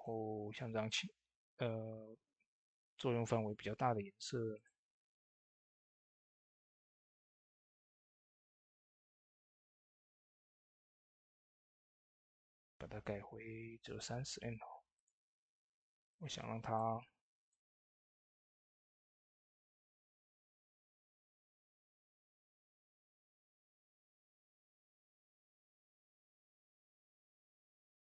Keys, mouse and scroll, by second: 1.2 shift+d, 4.7-14.4 drag, 4.7 typing, 8.0-9.1 drag, 9.9 click, 14.4 typing, 14.8-17.6 drag, 18.0 ctrl+z, 21.1 click, 23.1-23.5 scroll up 2, 23.1 typing, 23.4 shift+middle click, 24.2 middle click, 24.6 scroll up 1, 24.9 shift+middle click, 26.5-28.1 drag, 27.4 typing.